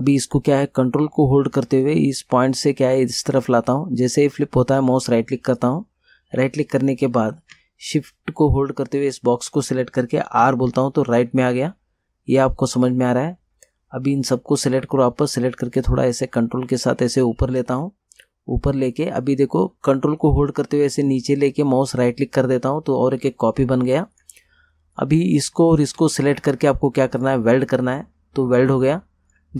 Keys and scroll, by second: 10.5 r.